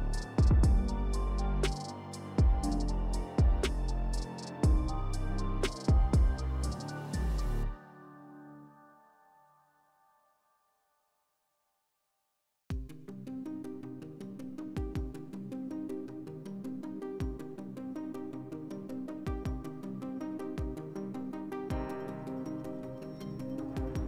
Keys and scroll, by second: 5.5 3, 7.5 s, 8.4 4, 10.9-11.8 typing, 13.0 3, 13.4 2, 19.0 3, 20.1 4.